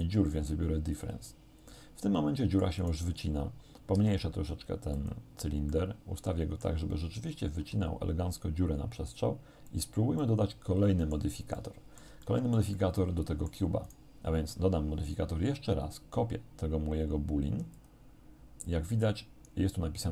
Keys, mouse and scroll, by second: 0.0 click, 1.0 click, 1.8-3.1 middle drag, 4.0 shift+s, 5.0 click, 5.8-6.8 middle drag, 7.6 g, 9.7 click, 10.2-11.4 middle drag, 11.6 middle click, 12.4-13.7 shift+middle drag, 13.9 right click, 17.8 click.